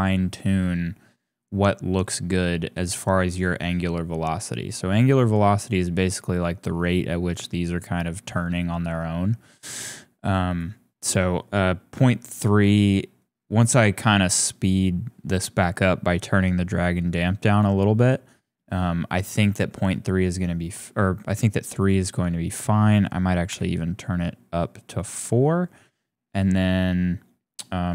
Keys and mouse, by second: 10.4 click, 17.6 click, 18.1-21.9 drag, 22.6 click, 24.9-27.9 drag.